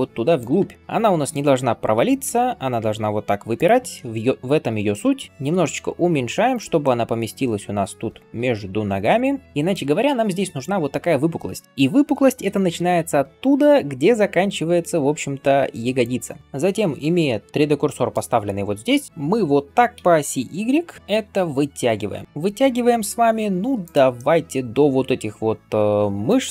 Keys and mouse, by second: 1.8 g, 4.4-26.5 shift+middle drag, 5.3 s, 12.3 g, 19.8 s, 22.8 s.